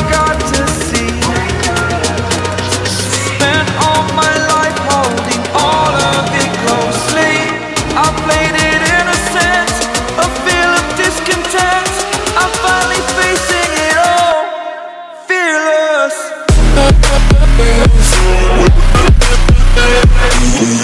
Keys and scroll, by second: 0.7 v, 2.6 v, 3.7 space, 6.9 Escape, 7.2 space, 8.1 space, 9.7 space, 10.5 space, 11.3 ctrl+0, 14.3 b, 16.4 x, 18.4 z.